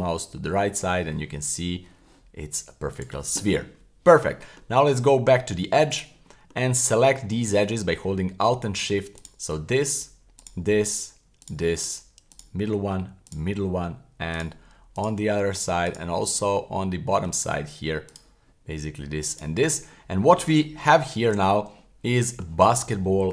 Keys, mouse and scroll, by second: 3.0 click, 4.3 middle click, 5.0 Tab, 5.9 right click, 6.3 middle click, 7.4 middle click, 7.6-8.1 scroll up 1, 9.2 alt+shift+right click, 10.4 alt+shift+right click, 11.4 alt+shift+right click, 12.3 alt+shift+right click, 13.3 alt+shift+right click, 14.3 alt+shift+right click, 14.9 alt+shift+right click, 15.9 alt+shift+right click, 16.3 middle click, 18.1 alt+shift+right click, 19.3 alt+shift+right click, 19.9 middle click, 20.7 middle click, 21.3 shift+z, 21.8 middle click.